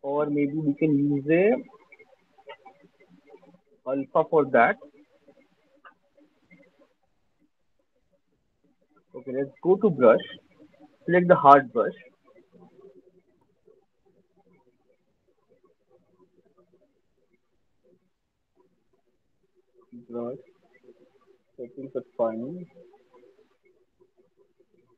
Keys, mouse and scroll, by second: 3.7 scroll down 5, 4.1 click, 5.4 scroll down 1, 6.4 scroll, 7.6 scroll, 8.9 scroll, 10.0 click, 11.1 click, 16.6 click, 18.7 click, 19.3 click, 21.3 right click, 22.2 click, 24.0 click.